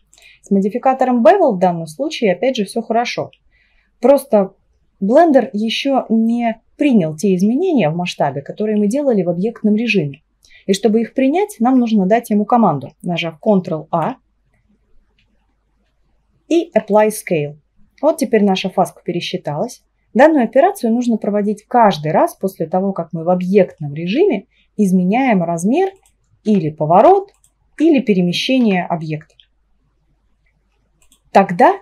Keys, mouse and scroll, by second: 13.9 ctrl+a, 20.0-24.2 right drag, 24.2 s, 26.5 r, 28.7 g, 29.0-31.7 right drag.